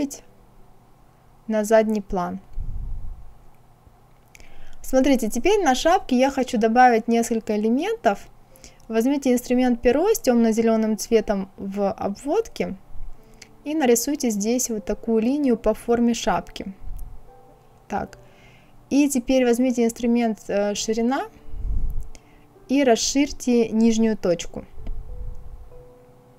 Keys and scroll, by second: 17.0 Escape.